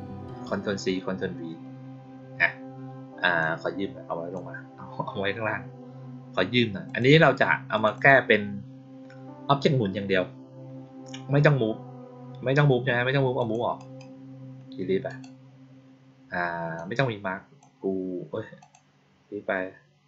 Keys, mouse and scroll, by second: 3.3-4.2 drag, 6.8 click, 7.6 click, 7.9 click, 13.3 click, 13.7 right click, 15.0 click, 16.7 click, 18.5 click.